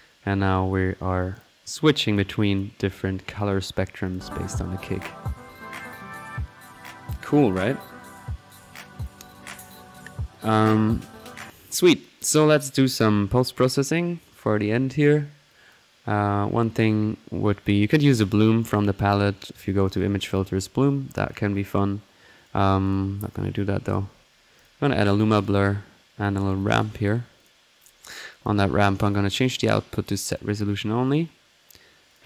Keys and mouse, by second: 0.5 middle click, 0.7-1.5 typing, 1.3 click, 1.6 click, 2.0 click, 4.0 click, 4.6 click, 7.6 click, 8.1-8.5 typing, 8.1-8.7 right drag, 8.7 click, 9.5 click, 10.0-11.4 middle drag, 11.4-11.8 typing, 11.4 click, 11.8-12.4 drag, 12.7 click, 13.1-13.4 right drag, 13.6 click, 14.8 click, 18.6-19.1 drag, 19.2 middle click, 19.8 click, 21.2 click, 21.7 middle click, 22.3-22.7 right drag, 22.8 click, 23.5 alt+l, 24.1-24.8 typing, 24.6-25.7 drag, 26.2 middle click, 26.3-27.0 typing, 27.4 click, 28.5 click, 29.0-29.8 drag, 30.2-31.3 drag, 32.1 click.